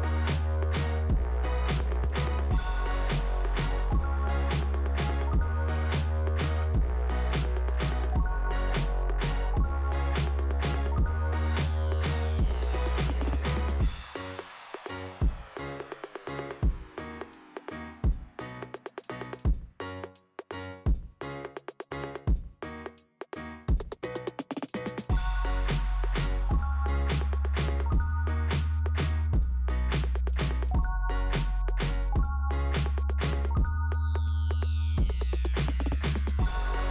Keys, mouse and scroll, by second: 0.5 click, 1.1 click, 8.0 click, 8.1 click, 9.9 click, 12.8 click, 12.9 click, 14.5 click, 16.3 click, 19.1 click, 24.5 scroll up 1, 25.0 click, 26.2 click, 27.7 click, 29.6 scroll down 2, 30.8 click, 32.2 click, 33.6 scroll down 2, 34.2 click, 36.3 p.